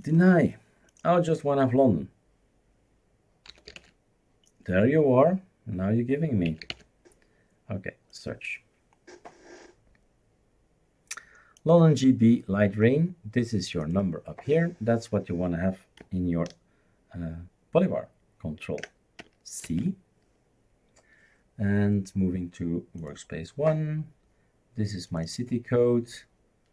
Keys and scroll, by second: 3.2-4.4 typing, 6.3-7.2 typing, 19.6 ctrl+c.